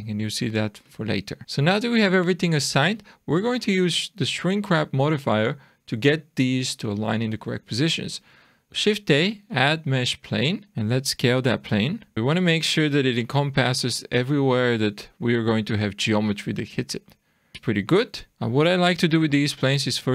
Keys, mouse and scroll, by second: 2.2 scroll down 2, 2.7 Tab, 8.8 shift+a, 10.8 click, 12.1 d, 12.4 click, 12.7-13.1 scroll down 2, 13.2 shift+middle click, 15.6-16.2 scroll up 3, 16.2 middle click, 17.1 shift+middle click, 18.0 shift+scroll down 1, 18.3 click, 19.4 click, 19.6 click.